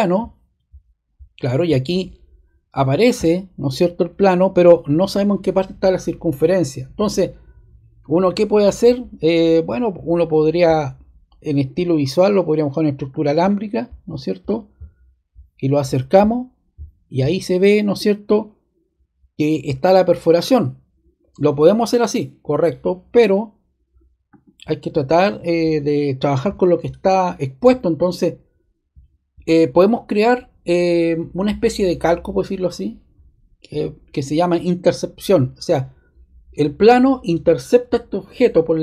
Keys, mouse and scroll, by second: 34.4-35.6 drag.